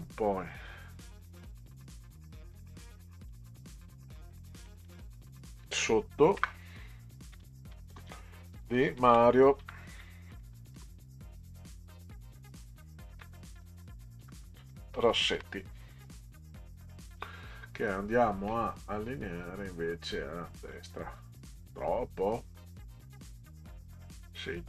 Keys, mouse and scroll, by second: 2.0-3.3 drag, 4.5 click, 6.4 Return, 7.4 d, 7.7 i, 7.9 space, 9.0-11.0 typing, 13.1-15.8 typing, 20.6 click, 22.9 click.